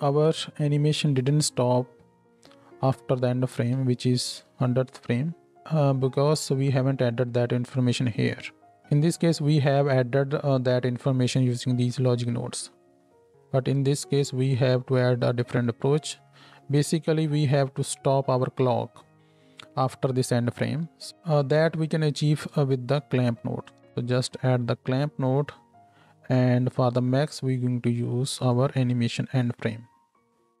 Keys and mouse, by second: 0.3 space, 3.8 space, 4.5 Tab, 4.5-14.3 middle drag, 5.6 Tab, 14.3-30.6 drag, 20.8 ctrl+h, 22.7 shift+a, 28.5-30.3 middle drag, 28.5-30.3 right drag.